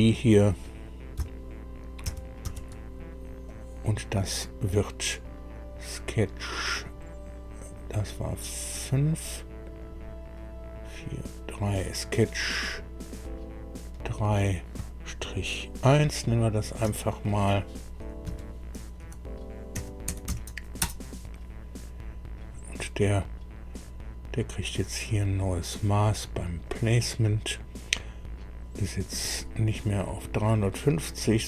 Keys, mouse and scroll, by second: 2.0 ctrl+c, 2.4 ctrl+v, 3.4 click, 7.6 click, 9.8 click, 10.9 click, 12.6 click, 16.8 F2, 18.2 Right, 19.0-20.7 typing, 20.8 Return, 26.6 click, 29.9 click, 30.6 click.